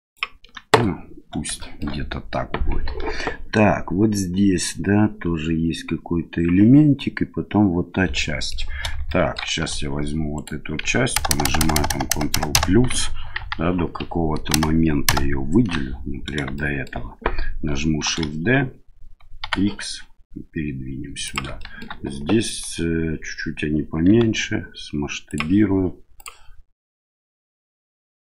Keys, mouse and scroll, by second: 0.0 ctrl+click, 1.5 shift+middle click, 8.2 middle click, 9.0 shift+middle click, 9.6 3, 10.3 right click, 13.3 KP_1, 16.5 shift+middle click, 18.1 shift+d, 21.6 shift+middle click, 24.1 s, 26.9-28.2 drag.